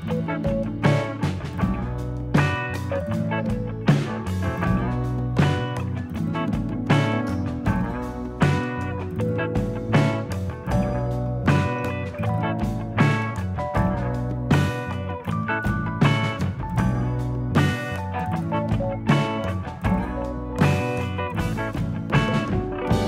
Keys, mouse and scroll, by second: 3.0 click, 3.9 middle click, 4.9 click, 5.6 scroll down 6, 5.8 middle click, 7.1-7.6 scroll up 2, 7.8 click, 8.8 click, 9.6 middle click, 10.4 click, 10.8 middle click, 11.8 click, 12.8 scroll down 3, 12.8 middle click, 13.0 middle click, 13.6-13.9 scroll down 3, 14.0 ctrl+s, 14.5 middle click, 15.7 KP_3, 16.3 z, 17.6-18.0 scroll up 3, 18.0 shift+middle click, 18.3-19.2 scroll up 3, 19.2 click, 19.9 click, 20.6 g, 21.9 click, 22.3 g.